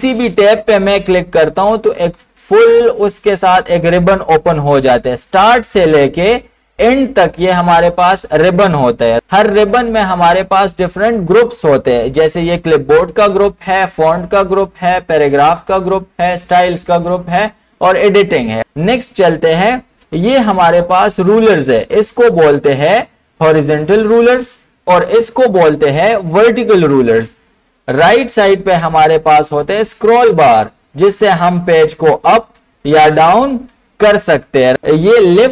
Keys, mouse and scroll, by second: 9.1 click, 22.7 ctrl+Num_Lock, 30.3-35.5 drag, 33.3 typing.